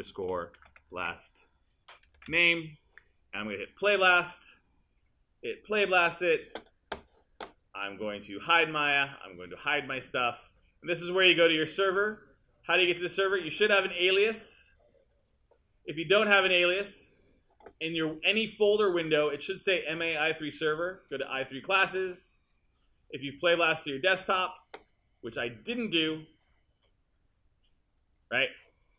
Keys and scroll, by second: 0.0-2.8 typing.